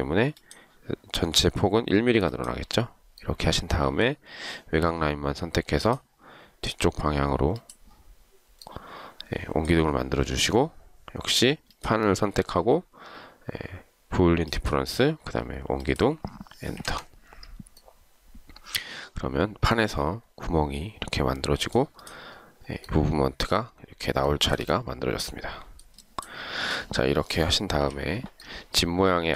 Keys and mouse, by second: 17.0 Return, 24.4 shift+right click, 27.9 Delete.